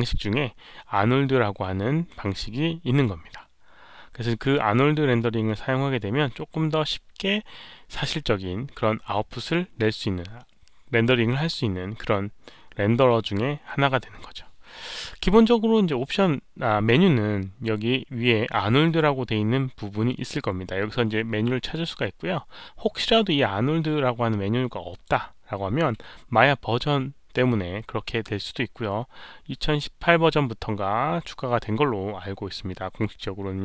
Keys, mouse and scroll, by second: 18.8 click, 24.9 click, 29.6 click.